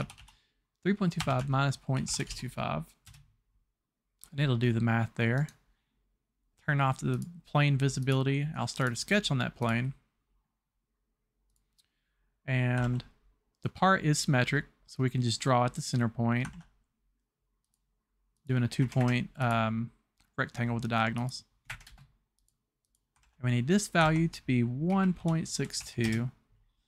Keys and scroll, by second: 0.2 KP_5, 1.2 KP_Subtract, 1.5 KP_Decimal, 2.0 KP_6, 2.0 KP_2, 2.3 KP_5, 3.1 Return, 12.8 alt+Tab, 16.6 alt+Tab, 18.8 Escape, 19.0 Escape, 21.7 Escape, 21.9 space, 23.2 Tab, 24.0 Tab, 25.0 KP_1, 25.3 KP_Decimal, 25.6 KP_6, 25.9 KP_2, 26.1 Return.